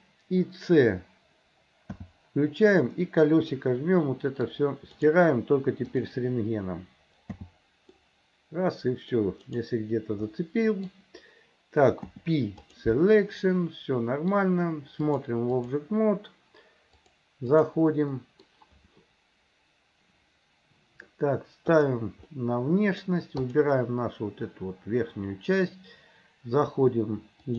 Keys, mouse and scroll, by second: 1.9 c, 2.8-3.7 scroll up 1, 6.0 click, 7.3 c, 10.3 middle click, 12.0 p, 13.4 middle click, 15.1 click, 17.1 click, 18.2 middle click, 22.3 middle click, 23.5 click.